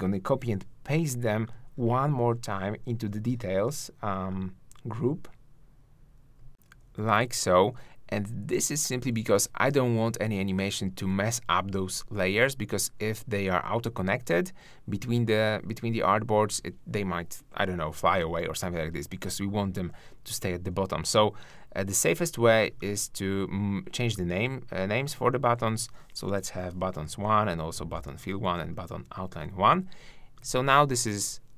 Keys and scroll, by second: 0.3 super+c, 3.1 super+v, 6.6 shift+Down, 8.8 shift+Up.